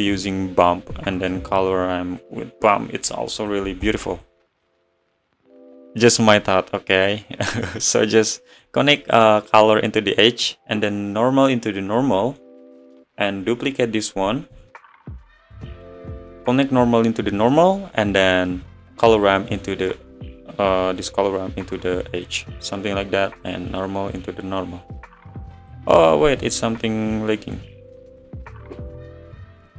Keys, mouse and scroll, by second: 2.2 click, 4.6-9.1 drag, 12.3-14.8 middle drag, 19.9-24.3 middle drag, 24.5 click, 28.7-29.7 middle drag.